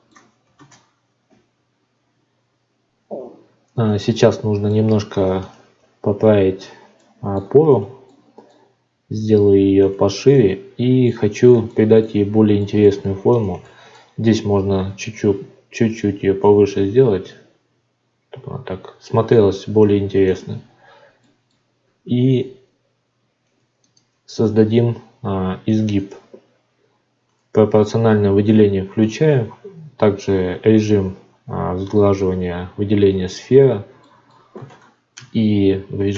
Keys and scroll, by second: 0.5 ctrl+space, 3.1 F9, 5.7 Tab, 14.8 g, 21.8 ctrl+r.